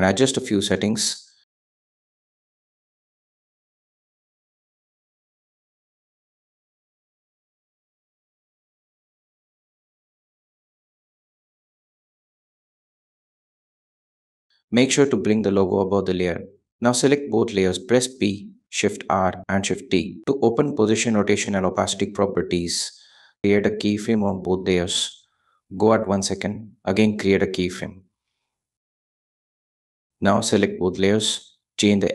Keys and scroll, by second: 1.0 shift+Left, 8.8 shift+Left, 19.7 p, 20.5 shift+p, 21.3 shift+r, 22.2 shift+t.